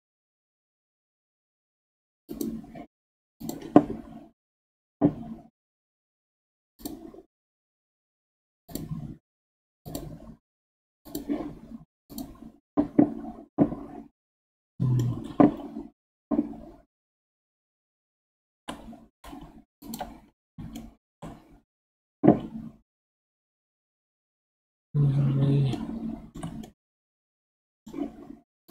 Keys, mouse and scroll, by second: 2.3 click, 3.4-6.5 drag, 8.7-11.1 drag, 14.1-17.2 middle drag, 17.2 g, 20.3-20.7 scroll up 5, 20.7-23.9 shift+middle drag, 25.7-28.7 shift+middle drag.